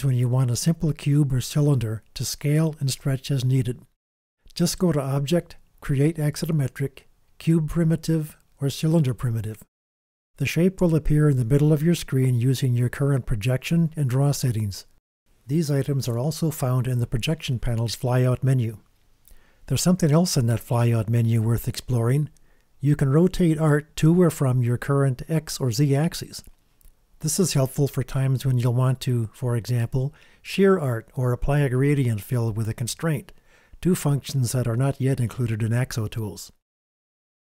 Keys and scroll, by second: 19.9 alt+shift+super+r, 21.1 Return, 21.1 KP_Enter, 21.4 super+space, 29.2 g.